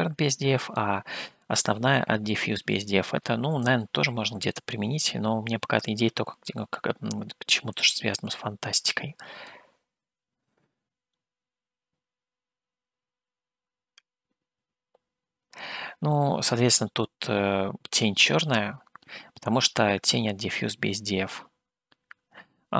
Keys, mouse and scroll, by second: 4.1-5.9 drag, 8.2-9.6 drag.